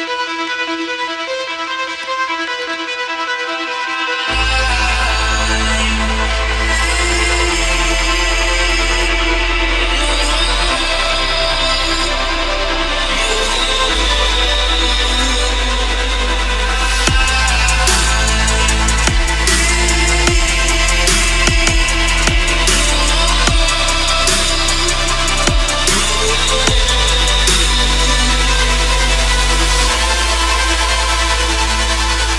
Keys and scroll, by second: 11.2 ctrl+alt+z, 16.1 ctrl+], 17.8 ctrl+-, 18.2 ctrl+=, 20.9 ctrl+-.